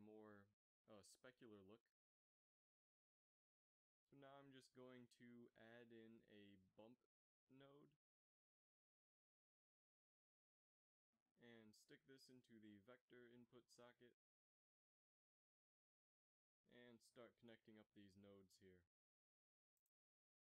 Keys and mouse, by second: 4.6 shift+a, 11.1-13.9 drag, 15.5 g, 18.6 click.